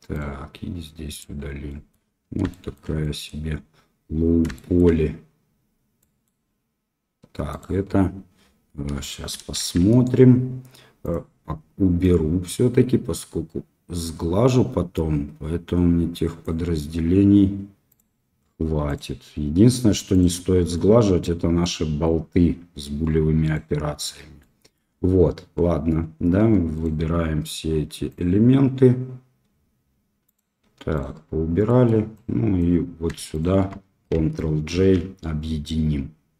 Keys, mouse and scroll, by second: 0.1 click, 1.6 middle drag, 2.5 shift+middle drag, 3.0 middle drag, 4.5 shift+middle drag, 5.9 middle drag, 7.5 click, 9.0 shift+drag, 9.5 shift+z, 11.0 click, 12.6-16.5 drag, 18.8 click, 20.1 click, 20.7-21.6 middle drag, 23.4-24.3 drag, 24.3-24.7 middle drag, 26.7 right click, 30.2 click, 30.9-31.3 drag, 31.6 middle click, 32.1-32.5 drag, 33.3 shift+click, 34.7 ctrl+j, 36.1-36.3 middle drag.